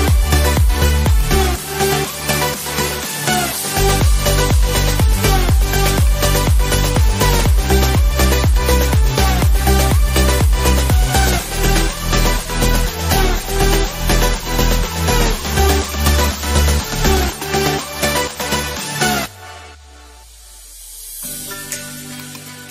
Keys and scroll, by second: 4.2 ctrl+shift+e, 19.3 ctrl+z.